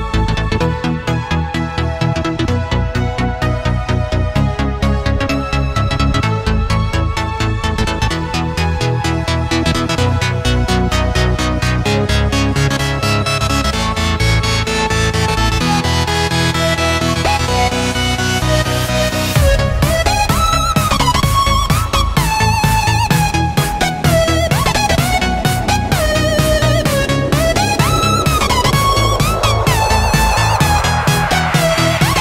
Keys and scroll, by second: 0.3 alt+super+space, 1.6 super+g, 9.0 shift+super+[, 9.7 space, 10.2 super+space, 10.3 super+space, 10.4 super+space, 10.5 super+space, 10.6 super+space, 11.7 super+x, 14.3 super+b, 15.2 space, 15.7 super+space, 15.8 super+space, 15.9 super+space, 16.0 super+space, 16.1 super+space, 17.3 space, 17.8 alt+super+space, 17.9 alt+super+space, 18.0 alt+super+space, 18.0 alt+super+space, 18.9 alt+super+space, 19.4 alt+super+space, 19.5 alt+super+space, 19.6 alt+super+space, 19.7-20.2 alt+super+space, 22.0 space, 22.5 super+space, 22.6 super+space, 22.6 super+space, 22.7 super+space, 23.0-24.0 super+space, 24.5 space, 25.0 space, 27.2 space, 27.7 super+space, 27.8 super+space, 27.9 super+space, 28.5 super+space, 29.0 alt+super+space, 29.1 alt+super+space, 29.2 alt+super+space, 29.3 alt+super+space, 29.4 alt+super+space, 29.9-31.2 super+space, 31.5 super+2.